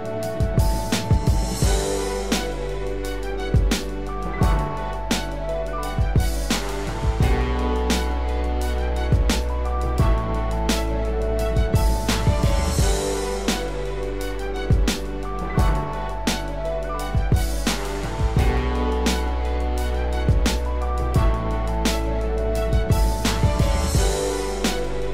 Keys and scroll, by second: 10.5 ctrl+-.